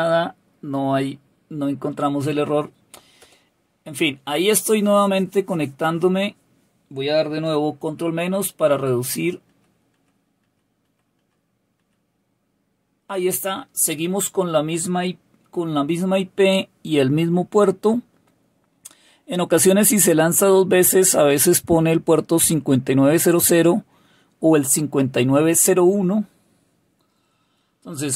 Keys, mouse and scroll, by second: 3.1 Return, 7.7 ctrl+-, 8.1 ctrl+-, 8.5 ctrl+-, 9.0 ctrl+-, 9.4 ctrl+-, 9.9 ctrl+-, 10.4 ctrl+-, 10.8 ctrl+-, 11.1 ctrl+-, 11.7 ctrl+-.